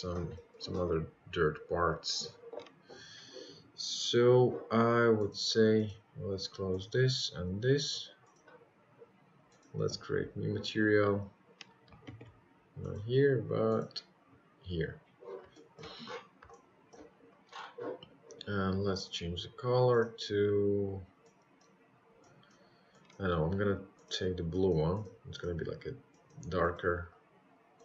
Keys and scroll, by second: 0.4 ctrl+z.